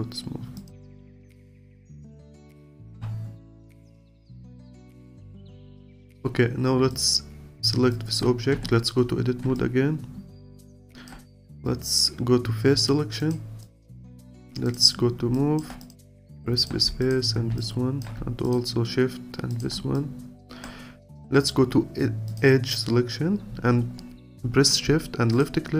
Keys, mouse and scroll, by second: 0.6 click, 1.1 click, 1.4-1.8 scroll down 2, 1.8-3.2 alt+drag, 3.2-4.1 scroll down 1, 4.1 alt+click, 5.0-5.7 scroll up 2, 5.7 alt+click, 6.4 scroll up 2, 6.9 click, 7.9 alt+click, 8.5 Tab, 9.5-12.6 alt+drag, 12.7 3, 13.2-15.0 drag, 15.0-15.3 scroll up 1, 15.3 alt+click, 16.4 alt+click, 17.6 alt+click, 19.5 shift+click, 19.9-25.4 alt+drag.